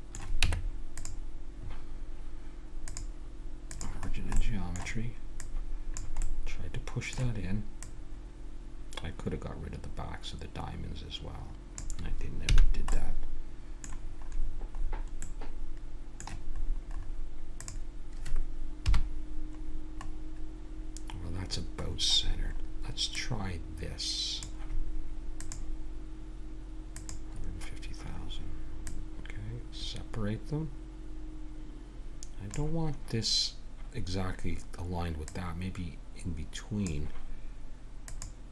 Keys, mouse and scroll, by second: 0.5 Tab, 2.8-4.8 drag, 5.4-7.1 drag, 7.8-8.9 drag, 8.9 right click, 12.5 a, 13.2-14.9 middle drag, 15.5 middle click, 16.6-17.6 middle drag, 17.6-18.9 right drag, 18.8 KP_1, 20.0-22.2 middle drag, 23.2-25.1 drag, 25.4-27.2 drag, 28.9-30.7 drag, 35.2-37.2 drag, 38.1-38.5 drag.